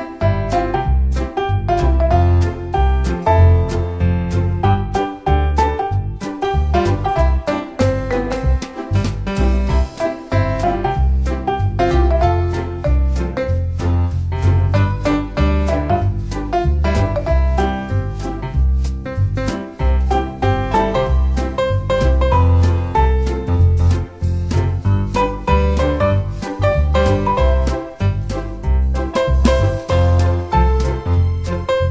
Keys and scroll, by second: 27.0 super+c, 27.3 super+v.